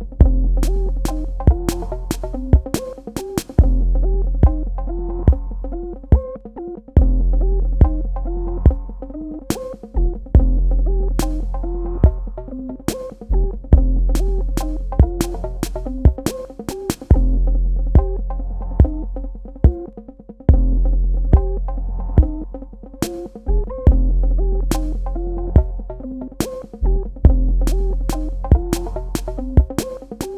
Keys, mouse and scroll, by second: 5.1 KP_3, 5.6 KP_Enter, 6.4 click, 6.6 space, 7.2 click, 17.1 ctrl+click, 18.2 ctrl+click, 19.4 ctrl+alt+click, 25.9 v, 26.8 click.